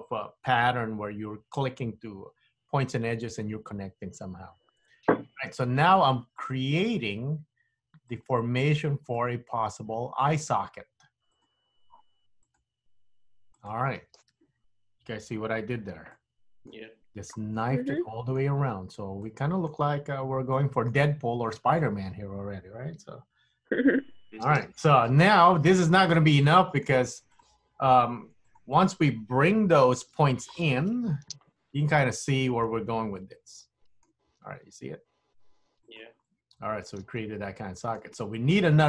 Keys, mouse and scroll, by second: 16.3 middle click, 18.0 middle click, 18.7-19.3 scroll up 2, 19.3 middle click, 20.7 middle click, 21.2-21.8 scroll up 1, 21.8 middle click, 26.2 middle click, 27.4 click, 28.5 shift+click, 29.7 KP_3, 31.0 g, 33.2 middle click, 34.5 g, 36.2 middle click.